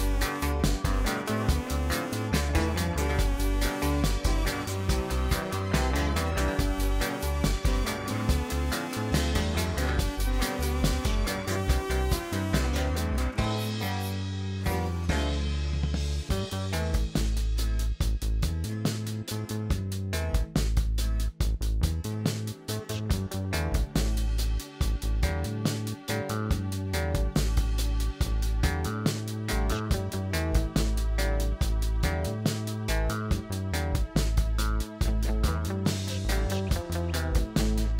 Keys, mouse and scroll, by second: 1.0 e, 6.8-8.0 scroll down 1, 8.0-8.8 scroll down 1, 9.5-10.6 middle drag, 10.6 e, 13.7 e, 16.1 Tab, 16.3 click, 16.6-18.2 middle drag, 18.2-18.6 scroll up 3, 18.6-19.5 middle drag, 19.9 click, 20.5 Tab, 21.3 3, 21.5 click, 22.3 alt+click, 22.4 alt+click, 23.1-24.6 shift+middle drag, 24.8 e, 28.5 alt+m, 29.8 click, 30.3 click, 31.0 middle click, 31.6 scroll down 2, 31.8-33.8 middle drag, 34.3 Tab, 34.5 click, 34.6-35.0 scroll down 4, 35.0-35.8 middle drag, 35.8 click, 36.3 KP_1, 37.2 g, 37.8 click.